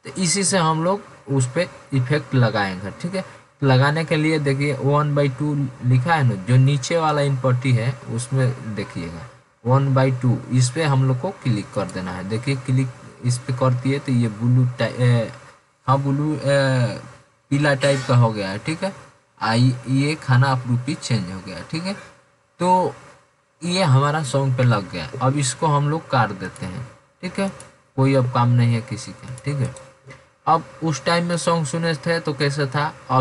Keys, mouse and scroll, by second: 28.4 click.